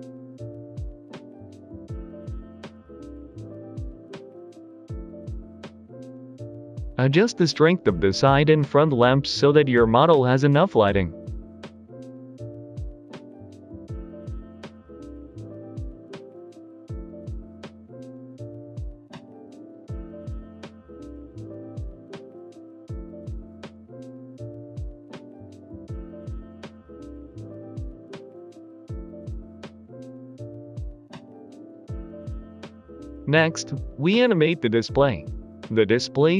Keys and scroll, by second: 0.0-7.9 typing, 6.6 ctrl+z, 6.9 Escape, 7.3 Escape, 9.0 g, 9.1 x, 9.8 g, 10.0 x, 12.0 s, 12.1 z, 13.9 Return, 16.2 typing, 16.3 Return, 17.4 typing, 21.2 typing, 21.4 Return, 22.5 a, 22.6 z, 23.5 s, 23.8 Escape, 25.0-25.6 typing, 25.1 Return, 25.7 Return, 26.7 g, 26.7 z, 27.5 g, 27.6 y, 29.2 g, 30.3 typing.